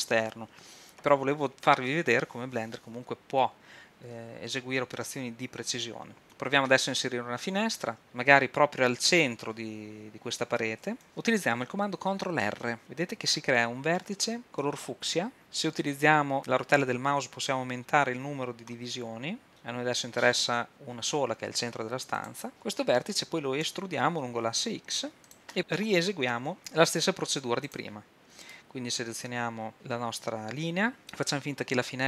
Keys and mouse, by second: 11.0 ctrl+r, 11.0 Escape, 12.8 ctrl+r, 22.3-23.7 drag, 22.5 Escape, 23.7 e, 27.0-28.5 drag, 28.5-29.5 middle drag, 29.5 click.